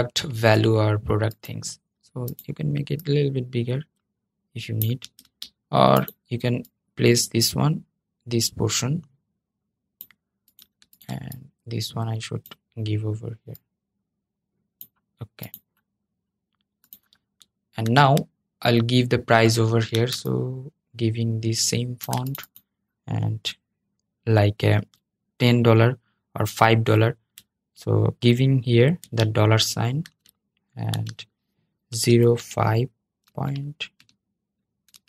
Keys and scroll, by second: 4.9 super+z.